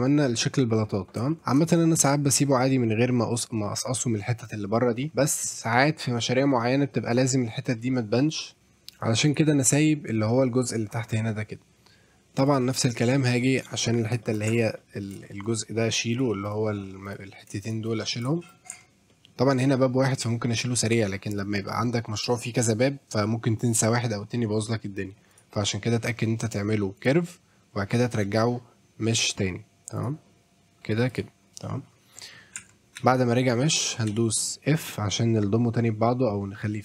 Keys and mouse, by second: 1.7 shift+middle drag, 2.0 middle drag, 5.1-5.5 middle drag, 6.0-6.6 middle drag, 7.6 middle drag, 8.2-8.6 right drag, 8.6-9.0 middle drag, 9.3 click, 9.5 middle drag, 12.5-13.7 drag, 13.9 middle drag, 14.2 shift+middle drag, 14.5 Tab, 15.3 shift+middle click, 15.4 shift+middle click, 16.1 click, 16.5 click, 17.1 click, 17.6 shift+click, 18.4 shift+middle click, 18.7 Tab, 19.1 middle drag, 25.3-27.1 drag, 27.9 click, 30.0-31.2 drag, 31.6 middle drag, 32.2 middle click, 32.6 Tab, 33.0 a, 34.1 f, 34.7 middle click.